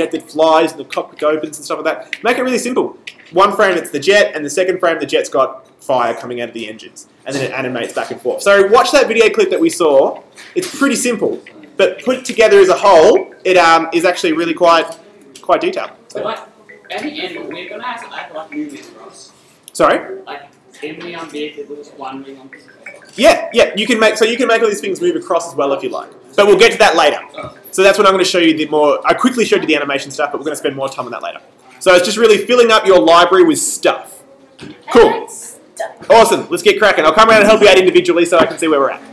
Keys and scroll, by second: 14.7 super+Return.